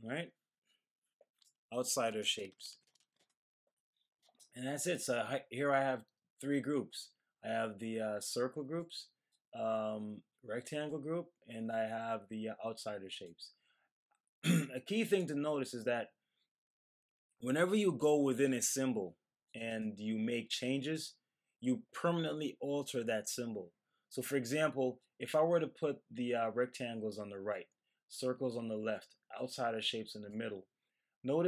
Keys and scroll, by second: 2.2-3.5 typing, 4.8-5.5 typing.